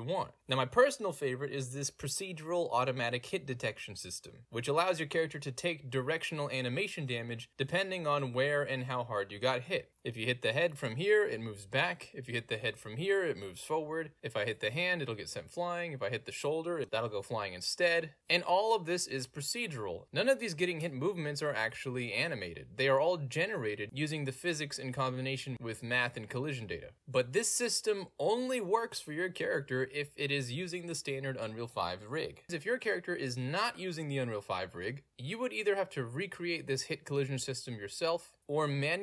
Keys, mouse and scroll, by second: 1.2 a, 1.2 w, 2.6 w, 3.1 click, 3.3 click, 3.6 click, 4.0 click, 4.3 click, 4.6 click, 5.1 click, 5.6 click, 6.0 click, 6.5 click, 6.8 click, 7.2 click, 7.6 d, 8.3 w, 8.6 click, 9.0 click, 9.6 click, 10.0 click, 10.3 click, 10.6 click, 11.2 a, 11.8 a, 12.2 s, 12.3 click, 12.7 click, 13.3 click, 14.2 click, 14.4 click, 14.8 click, 15.2 click, 15.5 click, 15.9 click, 16.5 click, 16.9 click, 17.6 click, 18.2 click, 18.7 click, 19.2 click, 19.6 click, 19.9 w, 20.3 click, 21.4 d, 22.0 s, 22.7 s, 23.6 click, 24.6-26.4 typing, 27.2 click, 27.7 click, 27.9 a, 28.7 click, 29.1 click, 29.4 a, 30.5 click, 30.8 click, 31.8 s, 31.9 click, 38.4-38.7 middle drag.